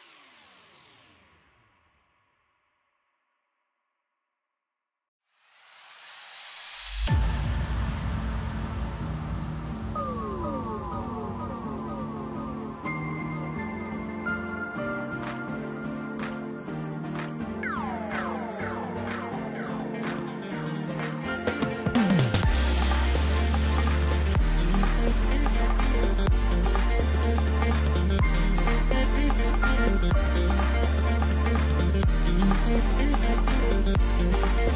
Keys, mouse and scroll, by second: 5.5-7.4 drag, 7.8-9.5 scroll up 2, 9.5-9.9 scroll down 1, 9.9-10.8 middle drag, 10.8-11.3 scroll up 2, 11.3-14.0 middle drag, 14.0-14.3 scroll up 3, 14.3-17.3 middle drag, 17.8 Tab, 19.4-19.7 scroll down 3, 20.1-22.3 middle drag, 22.3 Tab, 22.6-23.1 scroll down 3, 23.1-25.3 middle drag, 25.3 click, 25.9-26.5 scroll up 5, 26.7-27.1 scroll down 4, 27.1-30.1 middle drag, 30.4 KP_7, 31.4-33.0 scroll up 2, 33.0 ctrl+KP_6, 33.3-33.8 ctrl+KP_6, 33.9 ctrl+KP_6, 34.0 ctrl+KP_6, 34.6-34.7 scroll up 3.